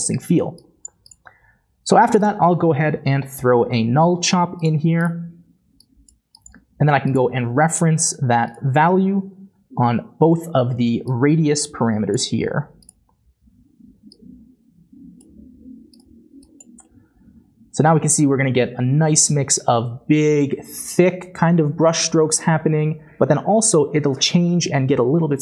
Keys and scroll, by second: 1.6-2.9 typing, 7.8 typing, 9.0 typing.